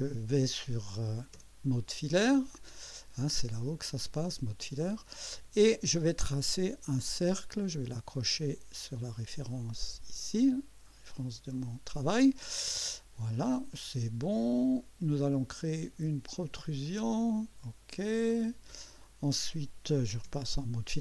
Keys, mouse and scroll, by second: 3.6 click, 4.8 click, 7.1 click, 9.5 click, 11.2 click, 14.4 click, 15.1-15.8 drag, 16.9 click, 18.3 click.